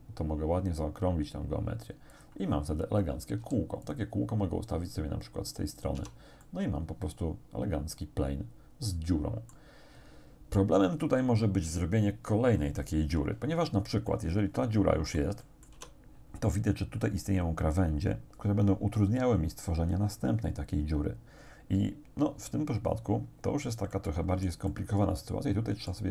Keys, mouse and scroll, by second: 2.2 click, 2.9-3.2 scroll down 1, 3.4 s, 3.9 click, 5.0-6.1 drag, 6.0 Tab, 6.4-9.8 drag, 14.1-15.9 drag, 15.8 Tab, 24.0-26.1 drag.